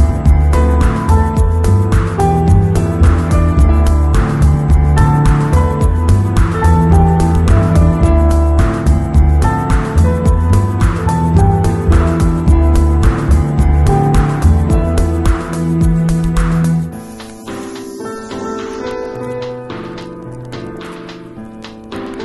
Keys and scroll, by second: 1.5 2, 2.2 [, 5.2 [, 9.1 3, 14.5 v, 14.9 space, 15.9 z, 17.3 v.